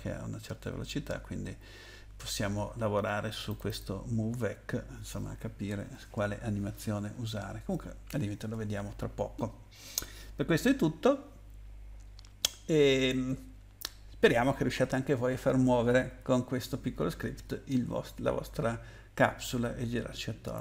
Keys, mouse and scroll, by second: 3.5 click, 3.7 click, 6.9-8.2 scroll down 4.